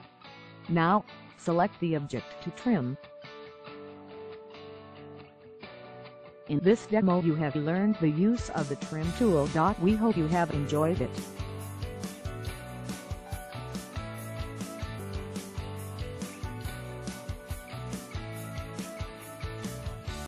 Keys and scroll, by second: 5.1 Escape.